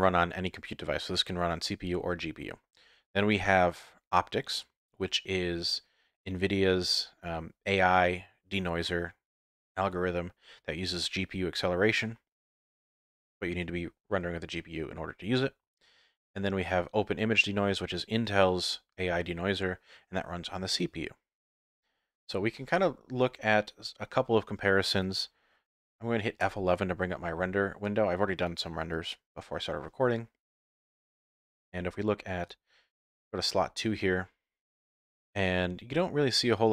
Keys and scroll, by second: 26.9 F11.